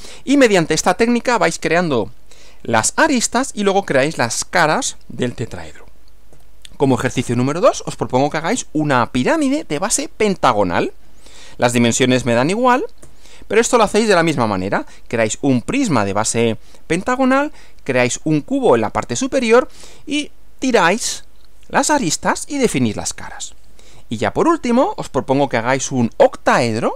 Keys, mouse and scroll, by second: 6.3 Right, 13.0 Right, 24.2 Right.